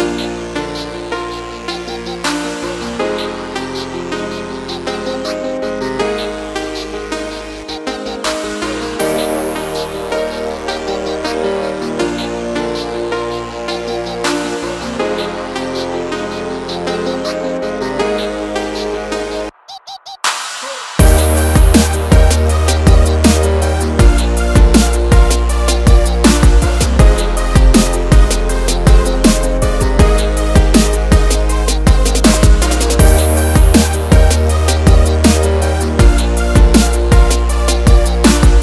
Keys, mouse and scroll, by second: 0.4 click, 1.0 ctrl+click, 2.3 double click, 3.3 ctrl+click, 5.2 click, 6.1 click, 6.9 click, 7.8 click, 8.5-8.8 scroll up 1, 9.2 scroll down 1, 9.9 click, 10.6 click, 12.4 click, 13.0 click, 13.1 scroll down 1, 13.3 click, 13.7 F4, 14.1 click, 14.9 F9, 16.2 Page_Down, 19.8 click, 21.2 click, 21.5 double click, 21.9 ctrl+o, 22.7-23.1 scroll down 1, 23.6 click, 24.2 click, 27.1 click, 28.3 F4, 30.3 F9, 31.3 Page_Down, 34.7 click, 35.4 scroll down 1, 35.7-36.2 scroll up 1, 36.7 scroll down 1, 37.0 click.